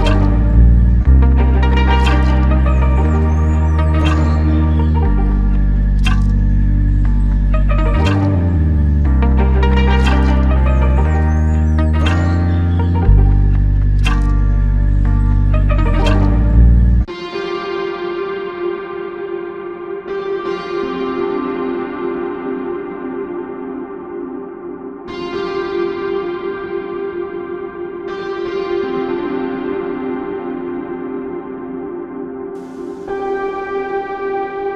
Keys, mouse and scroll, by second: 12.2 alt+click.